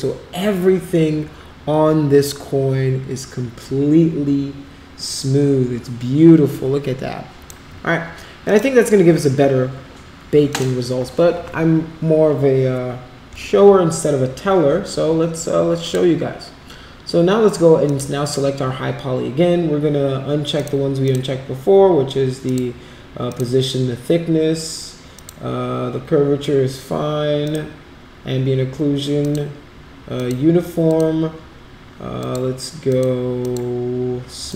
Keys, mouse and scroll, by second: 8.4 click, 10.5 click, 15.8 click, 17.8 click, 18.2 click, 20.5 click, 21.0 click, 22.4 click, 23.2 click, 25.1 click, 27.4 click, 29.2 click, 30.1 click, 30.8 click, 32.2 click, 32.9 click, 33.4 click, 34.4 click.